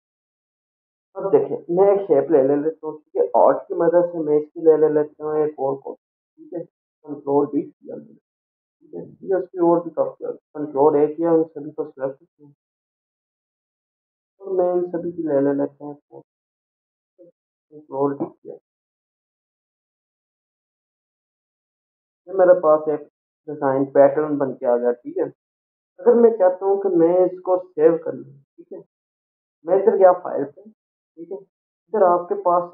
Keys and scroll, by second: 0.5 Delete, 7.4 ctrl+d, 10.7 ctrl+a, 18.0 ctrl+d, 21.0 ctrl+a, 21.8 Left.